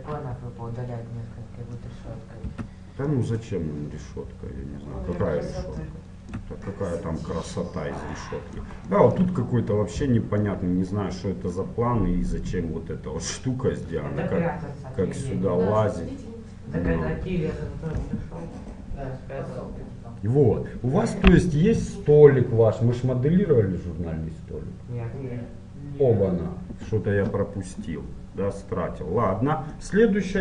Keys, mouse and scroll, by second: 2.6 Tab, 3.3-5.2 middle drag, 6.0-8.7 middle drag, 9.1-12.6 middle drag, 14.0-15.8 middle drag, 28.1-29.9 middle drag.